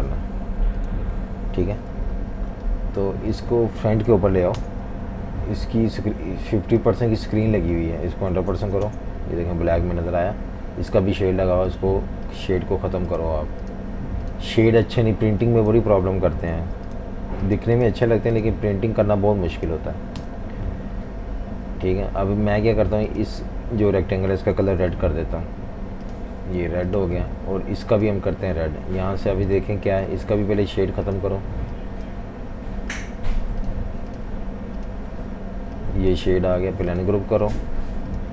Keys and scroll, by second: 4.6 shift+super+], 8.0-9.1 typing, 16.6 super+z, 20.2 Delete, 26.6 typing, 30.1 super+z, 36.6 super+z.